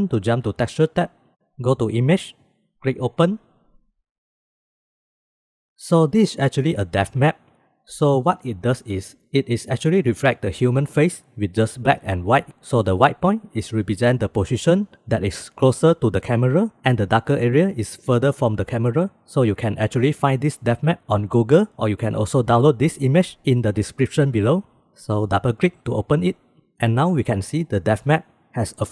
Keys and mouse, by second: 1.0 click, 3.3 click.